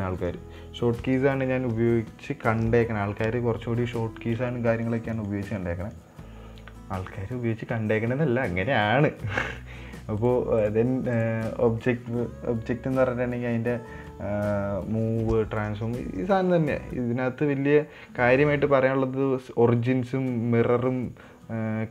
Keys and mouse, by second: 5.3 middle drag, 5.7 shift+middle click, 6.0 middle click, 10.6-11.2 drag, 11.5-21.9 drag.